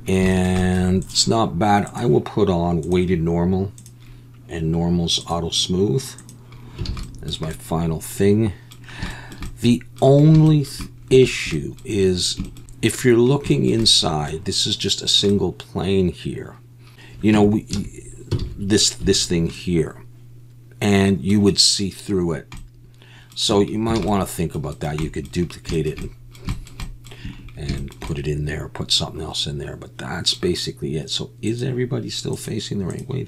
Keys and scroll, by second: 6.9 alt+a, 17.3 Tab, 17.7 a, 18.4 alt+a, 19.0 3, 23.5 Tab, 24.0 alt+a.